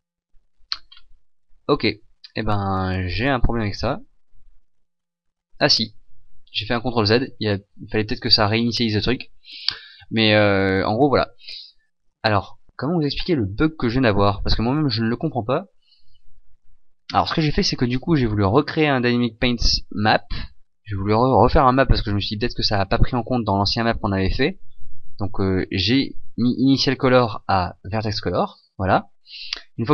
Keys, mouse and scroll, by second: 0.9-1.7 scroll down 2, 1.7-4.4 scroll up 3, 4.6 ctrl+z, 11.5-13.2 scroll down 1.